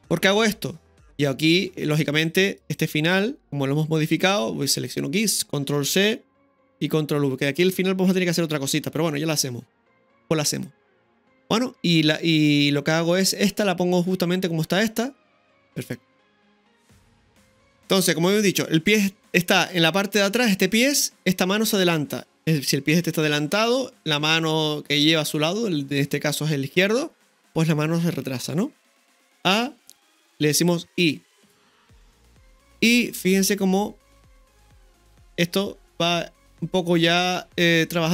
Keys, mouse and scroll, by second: 2.6 right click, 3.4 Delete, 4.8 right click, 5.8 ctrl+c, 6.7 click, 7.5 click, 9.1 ctrl+v, 10.6 click, 15.6 ctrl+KP_1, 15.6 KP_3, 28.5 scroll down 1, 29.3 scroll down 1, 29.4 a, 30.9 i, 32.6-33.7 drag, 33.7 space.